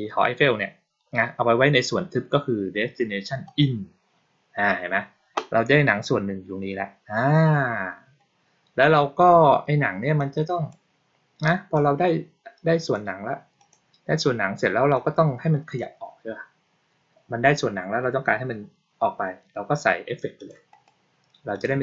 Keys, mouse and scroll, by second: 3.3 click, 10.0-10.6 drag, 11.6-12.8 drag, 13.4 click, 14.8 click, 20.2 click, 20.6 right click, 21.4 click.